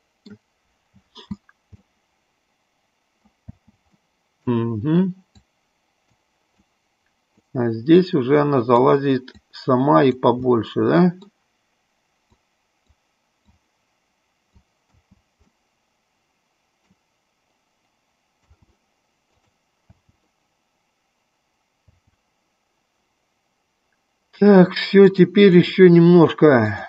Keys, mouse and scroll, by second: 1.2 space, 2.0-3.5 middle drag, 3.8 space, 4.1 middle click, 5.7 click, 7.0 click, 8.2 click, 9.6 click, 10.6 middle click, 12.7 click, 13.9 click, 15.1 space, 15.7-17.0 middle drag, 18.6 space, 19.6 click, 20.1 space, 22.2 space, 25.2 click.